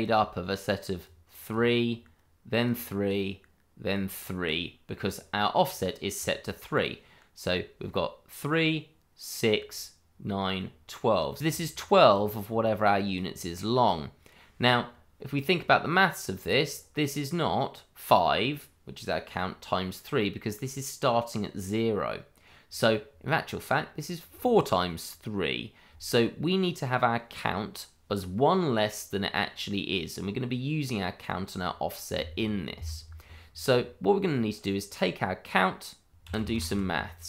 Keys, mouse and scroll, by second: 11.3 click, 11.4 ctrl+z, 11.4 click, 32.7 Escape, 36.1 click, 36.8-37.2 typing.